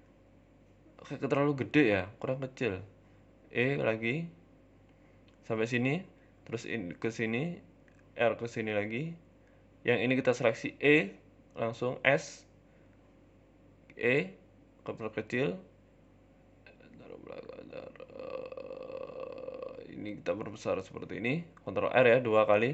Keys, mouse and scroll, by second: 0.0 shift+middle click, 0.5 shift+middle click, 0.6 middle click, 0.8 ctrl+z, 1.7 s, 2.7 KP_1, 4.3 e, 5.4 shift+middle click, 5.9 ctrl+r, 7.4 ctrl+r, 8.8 ctrl+r, 9.7 click, 10.8 s, 12.5 click, 13.0 shift+middle click, 13.6 e, 14.2 s, 15.4 shift+middle click, 16.0 g, 16.9 s, 19.8 s, 20.8 click, 21.6 scroll down 2, 21.7 shift+middle click, 22.2-22.7 scroll down 1, 22.2 e.